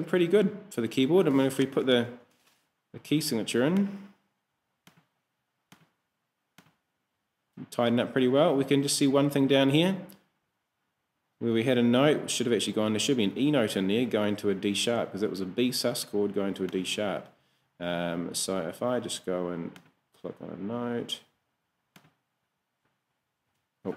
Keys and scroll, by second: 1.6 Escape, 2.2 k, 23.5 super+z.